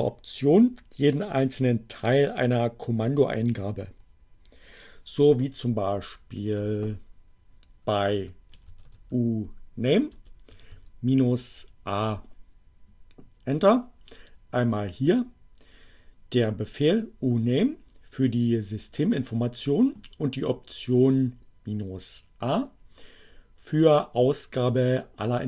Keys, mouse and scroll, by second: 6.2 click, 7.9-9.4 typing, 10.4 -, 10.7 a, 11.1 Return.